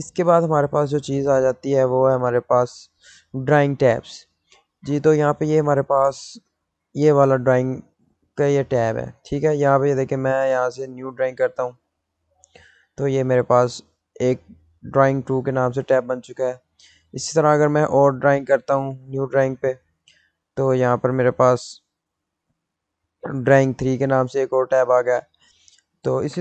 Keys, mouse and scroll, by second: 0.6 right click, 1.6 click, 8.1 click, 8.1 click, 11.7 click, 19.4 click, 21.9 click.